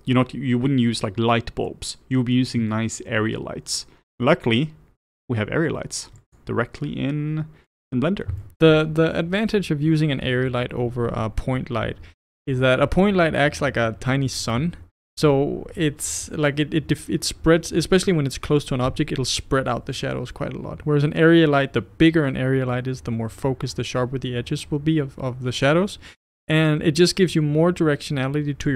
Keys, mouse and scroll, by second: 6.2 click, 7.7-12.8 middle drag, 12.8-27.7 scroll up 1, 27.7-28.7 scroll up 1.